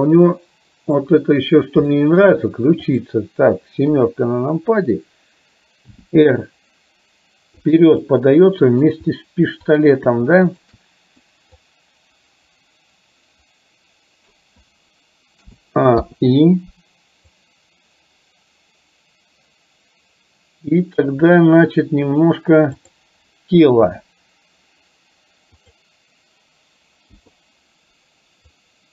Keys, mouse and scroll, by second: 0.3-1.2 middle drag, 1.9-2.4 shift+middle drag, 3.9 KP_7, 5.9 r, 8.2 middle click, 9.8 click, 10.5 shift+click, 11.8-14.5 drag, 15.5 a, 16.0 i, 17.5-21.3 drag, 23.9 r, 27.2 i, 28.7-28.9 drag.